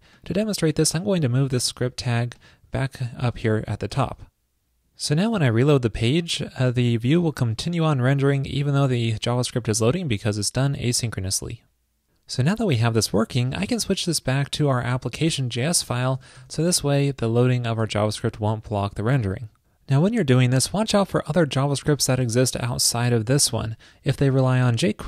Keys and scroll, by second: 1.6 super+x, 3.4 super+v, 4.2 super+s, 18.0 super+s.